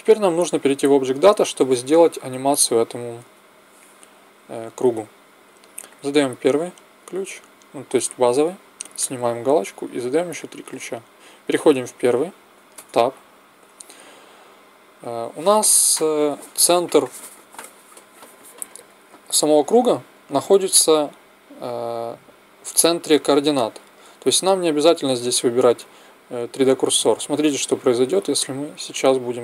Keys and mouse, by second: 0.5-4.9 drag, 5.9-14.3 drag, 12.7 Tab, 17.0-19.1 drag, 28.2 a, 28.6 a.